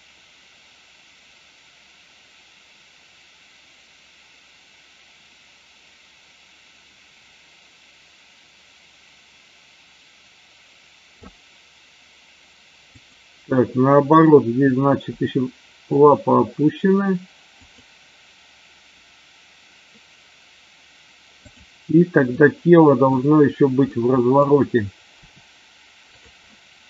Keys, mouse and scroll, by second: 13.0 click, 15.1 r, 17.6 click, 21.3-21.8 drag, 22.2-23.1 middle drag, 23.8 middle click, 26.1 click, 26.3-26.8 middle drag.